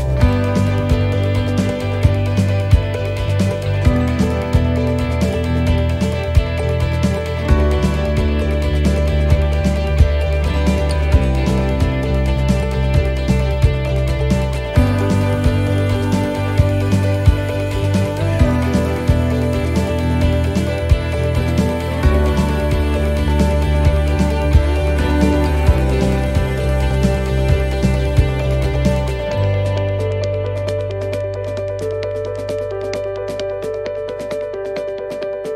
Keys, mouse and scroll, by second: 1.6 middle click, 3.5 ctrl+r, 6.3 middle click, 9.8 click, 11.5 right click, 12.0-14.5 shift+right click, 16.2 shift+right click, 16.3 middle click, 17.6 shift+right click, 18.0 shift+right click, 18.4 shift+right click, 18.8 middle click, 20.1 shift+right click, 20.6 shift+right click, 21.2 shift+right click, 22.1 shift+right click, 22.8 shift+right click, 23.2 shift+right click, 23.7 middle click, 25.0 shift+right click, 26.3 middle click, 27.8 shift+right click, 29.0 shift+right click, 31.0 shift+right click, 31.2 middle click, 32.8 e, 34.0 alt+s.